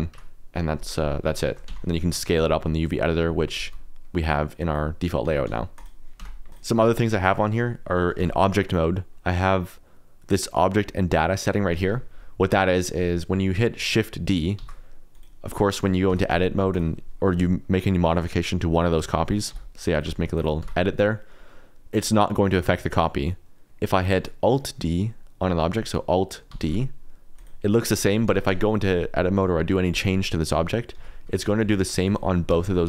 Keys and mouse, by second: 0.1 Tab, 1.1 click, 1.4 shift+middle click, 1.6 Tab, 2.3 s, 3.5 ctrl+z, 4.4 click, 5.2 a, 5.4 s, 6.2 Tab, 6.5 x, 7.1 shift+middle click, 8.1 q, 12.9 middle click, 14.5 shift+d, 15.1 click, 16.3 Tab, 16.4 3, 19.5 i, 20.0 e, 20.3 click, 20.6 Tab, 21.0 middle click, 23.9 middle click, 26.5 alt+d, 28.2 Tab, 28.4 3, 28.6 click, 30.9 i, 31.3 click, 31.6 e, 32.0 click, 32.5 Tab.